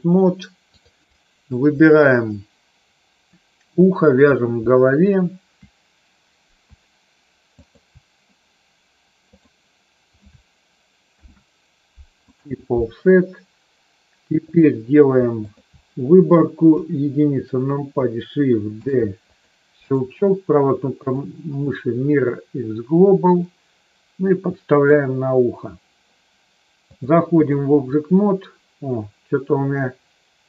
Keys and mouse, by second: 0.6 click, 4.3 click, 7.5 shift+click, 11.0 ctrl+p, 14.4 click, 16.6 KP_1, 18.8 shift+d, 19.3 click, 22.3-24.9 drag, 27.0 click.